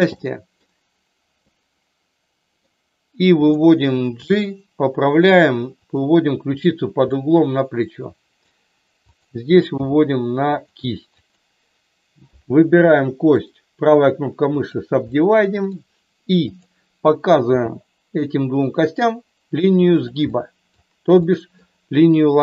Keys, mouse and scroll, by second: 0.1 middle click, 1.4-2.5 middle drag, 3.4 click, 4.1 g, 5.8 click, 7.0-8.5 middle drag, 9.8 g, 10.4 click, 11.1 click, 13.4-14.7 right drag, 15.0 middle click, 16.4 click, 17.4 g, 20.3 middle click, 21.3 middle click.